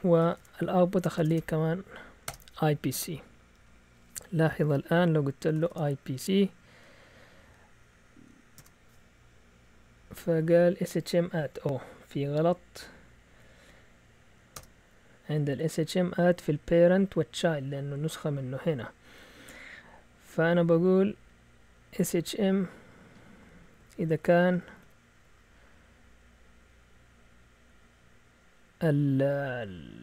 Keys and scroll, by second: 0.0-2.7 typing, 4.1-6.0 typing, 8.6 Return, 11.2 Up, 11.4-12.0 typing, 14.6 Return, 15.5 Down, 16.0-16.5 typing, 21.1 Up, 22.2-23.3 typing.